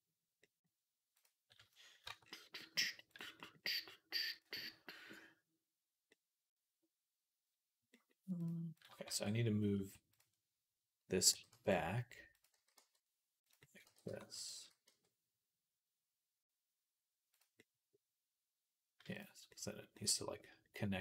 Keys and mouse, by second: 1.9 Tab, 3.0-4.2 drag, 4.2 middle click, 5.9-8.2 middle drag, 8.2 click, 8.3 middle click, 8.6 click, 8.7-9.9 middle drag, 8.9 Tab, 9.6 Tab, 9.9 click, 10.0-12.4 middle drag, 11.1 g, 12.4-16.7 drag, 12.4 s, 13.7 g, 14.4 s, 16.7-21.0 middle drag, 19.0 click.